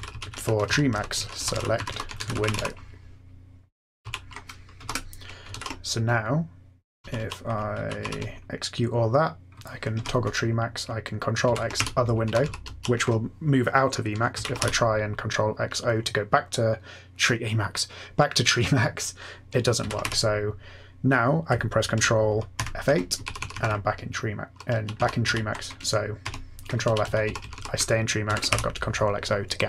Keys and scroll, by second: 0.0-2.5 typing, 4.8-8.5 typing, 9.7-12.7 typing, 14.3 x, 14.5 o, 19.8 ctrl+x, 20.0 o, 22.5 ctrl+F8, 23.2 Up, 23.3 Up, 23.5 Up, 23.6 Up, 24.1 Up, 24.3-24.7 Up, 24.7 Down, 24.9 Up, 25.2 Down, 26.2 ctrl+F8, 26.8 Down, 27.0 Down, 27.4 Up, 27.5 Up, 28.2 ctrl+x, 28.4 o.